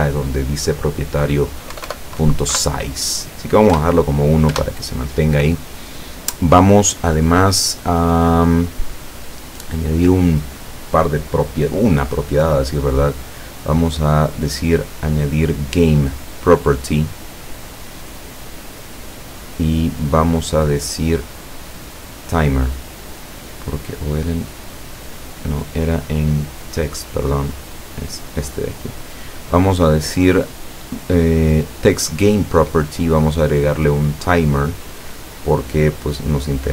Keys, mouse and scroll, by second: 1.7 BackSpace, 2.5 KP_1, 3.7 Return, 4.6 Return, 5.9 scroll down 1, 17.7 click, 20.1 click, 22.4 click, 23.5 click, 24.4 click, 27.8 click, 32.7 click, 34.3 click.